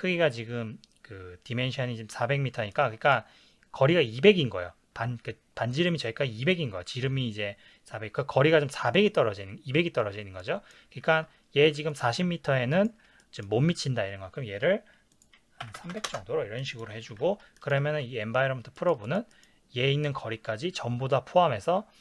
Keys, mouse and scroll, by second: 2.7-12.0 middle drag, 12.0 click, 13.2-16.1 ctrl+middle drag, 16.1 KP_0, 16.1 KP_Enter, 16.1 click, 16.6-22.0 middle drag, 17.1 ctrl+s.